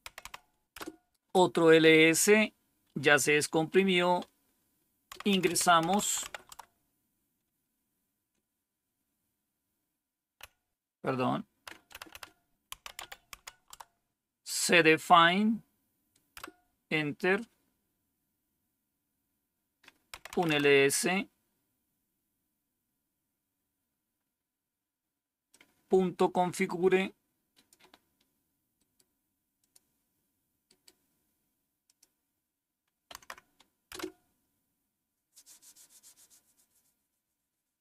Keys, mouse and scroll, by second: 0.0-0.7 typing, 4.8-6.7 typing, 10.3-13.7 typing, 16.3 Return, 19.8-20.7 typing, 22.2 scroll down 1, 22.9 scroll down 1, 25.4-27.7 drag, 25.4 typing, 28.7 right click, 29.5 click, 30.4 typing, 30.6 right click, 31.8 click, 33.0 Right, 33.8 Return.